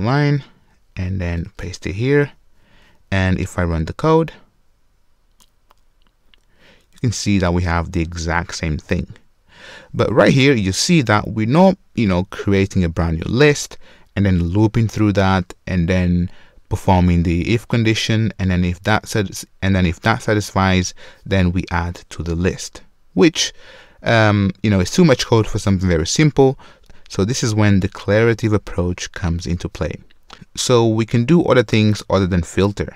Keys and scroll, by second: 0.2 super+c, 1.7 super+v.